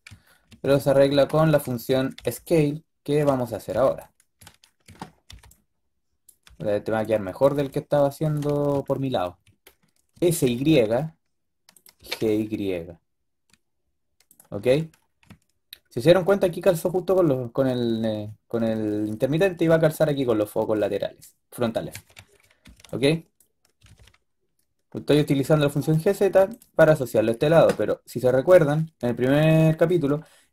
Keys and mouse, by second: 0.5 a, 1.5 a, 1.8 a, 2.0 a, 2.1 b, 4.5 b, 5.2 b, 6.3 b, 7.4 b, 10.0 s, 11.9 g, 21.8 a, 22.0 a, 22.3 a, 22.5 b, 23.6 g, 25.3 g.